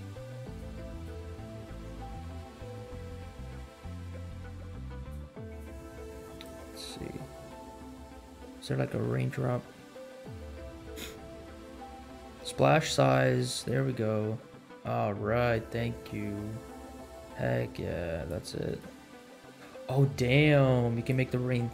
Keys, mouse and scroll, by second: 0.4 click, 0.8 click, 4.9 click, 5.4 click, 6.3 click, 13.6-18.5 drag, 18.7-21.2 drag, 21.5-21.7 scroll up 3.